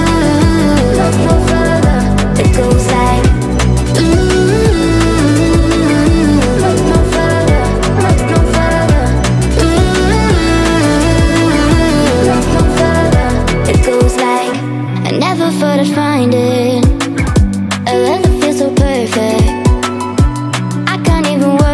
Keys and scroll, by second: 12.2 space, 16.6 space.